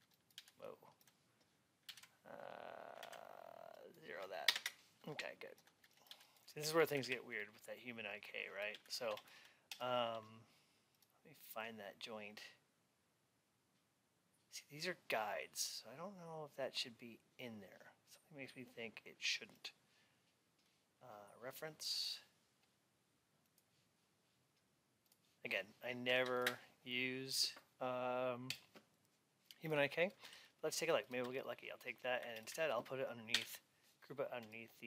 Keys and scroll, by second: 1.8 ctrl+a, 4.4 Return, 6.0 alt+x.